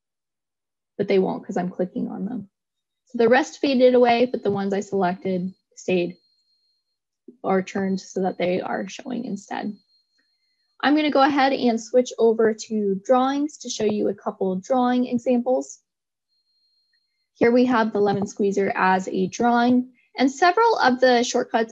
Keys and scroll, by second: 11.2 ctrl+Tab.